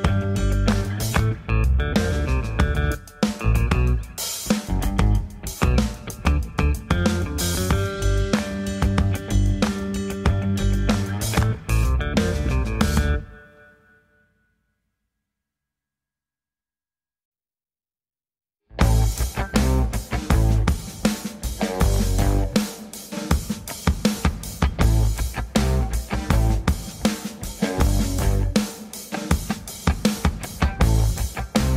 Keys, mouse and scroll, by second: 0.0-0.1 typing, 0.7 click, 0.9-1.4 scroll down 3, 1.0 click, 1.4-2.0 scroll up 3, 2.0 click, 2.2 g, 2.9 click, 3.5 click, 5.8 ctrl+s, 6.2-6.6 scroll down 4, 6.7 ctrl+s, 8.0 scroll up 3, 14.6 middle click, 15.0 shift+middle click, 15.3 middle click, 18.3 middle click.